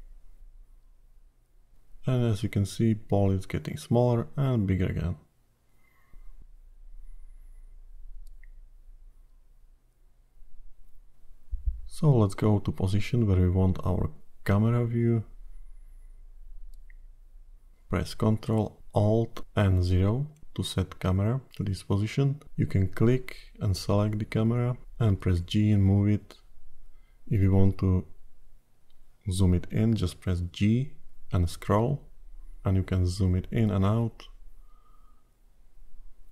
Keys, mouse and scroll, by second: 0.3 i, 2.9 click, 11.6-12.4 scroll down 3, 12.4 middle click, 13.3-13.7 scroll down 2, 13.7 middle click, 16.4-17.3 scroll up 4, 17.3 middle click, 20.3 ctrl+alt+KP_0, 22.4 click, 23.5 g, 29.2 g, 36.1 click.